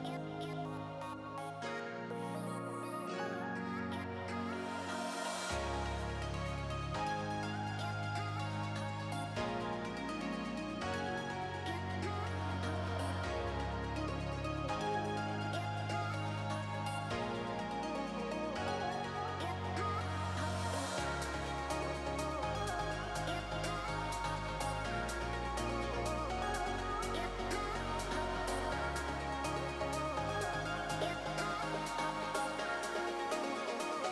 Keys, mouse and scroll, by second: 0.2-0.7 scroll up 4, 0.7 click, 0.9 shift+click, 1.9 middle click, 3.2 shift+click, 3.8 scroll down 2, 3.9 middle click, 5.5 ctrl+j, 6.9 alt+a, 7.1 scroll down 3, 7.3 shift+middle click, 7.5 middle click, 8.0 click, 8.7 middle click, 9.7-10.1 scroll down 7, 10.2 shift+middle click, 11.1 click, 15.4 click, 17.1 middle click, 18.2 click, 19.8-20.4 scroll up 4, 20.2 middle click, 22.6 scroll up 1, 22.6 middle click, 23.0 scroll down 2, 23.2 shift+middle click, 23.5 middle click.